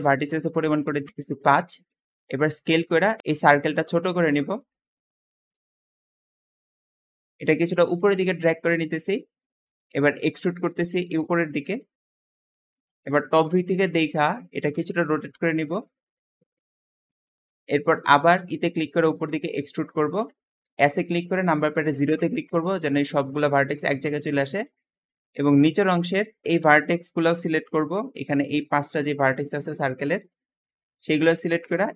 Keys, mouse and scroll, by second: 0.4 5, 0.9 Return, 2.0-2.7 scroll down 8, 2.7-3.2 scroll up 1, 3.3 s, 5.7-6.6 scroll up 5, 5.9 s, 6.2 click, 6.6-7.7 shift+middle drag, 7.7 shift+click, 9.4 shift+click, 10.0 e, 10.4 z, 13.3 KP_7, 14.4 shift+middle click, 14.7 scroll up 2, 15.4 r, 16.9-18.3 shift+middle drag, 18.3 e, 18.9 z, 20.7 s, 22.1 KP_0, 22.4 Return, 24.1-27.3 middle drag, 27.3 shift+click, 27.6 shift+click, 28.1 shift+middle click, 29.0 shift+click, 29.4 shift+click, 29.7-30.9 shift+middle drag, 30.9 shift+click, 31.2 shift+middle click, 31.9 e.